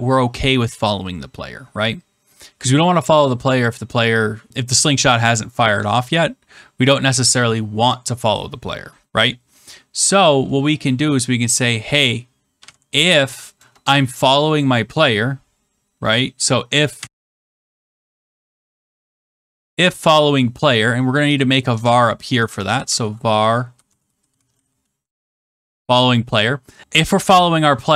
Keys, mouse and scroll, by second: 12.5-13.5 typing, 16.7-19.4 typing, 20.0 Return, 21.3 click, 21.6-26.0 typing, 22.3 click, 26.8 click.